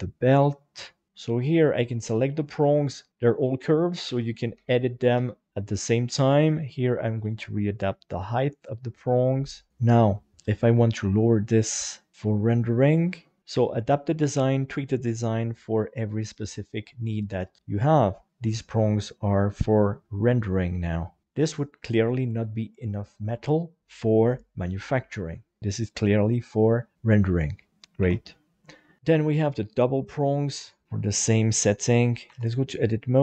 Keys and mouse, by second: 1.1 g, 1.6 right click, 2.3 shift+right click, 3.1 alt+a, 4.0 alt+z, 4.5 b, 5.2 alt+z, 5.3 middle click, 5.8 click, 7.8 middle click, 9.1 click, 9.7 shift+right click, 10.4 click, 13.5 shift+middle click, 18.3 Tab, 18.6-20.3 middle drag, 21.2 middle click, 22.3 middle click, 26.2-27.2 middle drag, 27.7 Tab, 28.0 alt+a, 29.0 click, 30.6 click, 30.8 KP_7, 32.3 Tab.